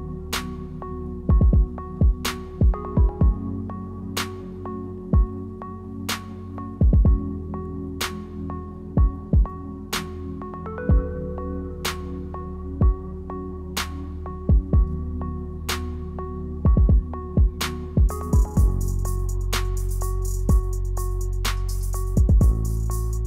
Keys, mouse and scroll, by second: 1.9 g, 3.0 s, 4.1 g, 5.3 s, 9.0 ctrl+z, 9.1 ctrl+z, 9.5 r, 10.0 e, 12.3 g, 13.3 r, 13.9 g, 14.8 r, 15.9 g, 17.2 r, 18.6 g, 19.4 g, 20.4 e, 21.9 g, 22.6 s, 23.1 g.